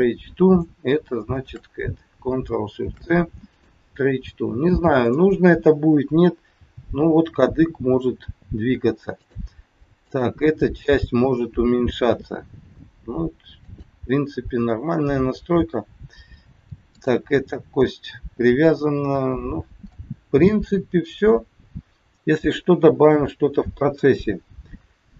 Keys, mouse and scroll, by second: 0.4 click, 1.2 shift+click, 2.8 ctrl+shift+c, 4.8 click, 6.6 g, 9.9 click, 10.5 g, 14.4 scroll down 3, 16.2 scroll up 1, 16.9 click, 19.2-19.6 scroll down 3, 20.0 middle click, 22.7 KP_1.